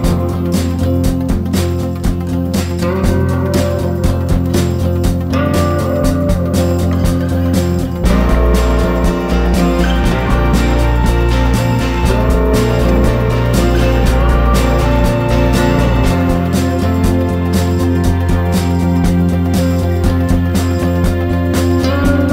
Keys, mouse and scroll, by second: 0.4 click, 0.6 scroll up 1, 0.7 Tab, 0.8 shift+middle click, 1.2 ctrl+r, 3.4 scroll up 1, 3.5 3, 3.7 click, 3.8 shift+click, 4.0 shift+click, 4.2 shift+click, 4.4 shift+click, 4.5 shift+click, 4.9 e, 5.6 Tab, 6.5 ctrl+2, 6.9 click, 7.1 click, 7.9-8.4 drag, 8.4-9.3 scroll down 1, 9.4 click, 9.6 click, 9.9 scroll up 1, 10.2-10.6 shift+middle drag, 10.6-12.5 scroll down 3, 10.8 click, 13.1 click, 13.4-14.0 scroll up 1, 14.0 click, 14.4 shift+click, 14.5 shift+click, 14.8 g, 16.3 shift+right click, 16.4 shift+a, 21.6 scroll up 1, 21.7 Tab, 21.8 middle click, 22.1 scroll down 2, 22.2-22.3 shift+middle drag.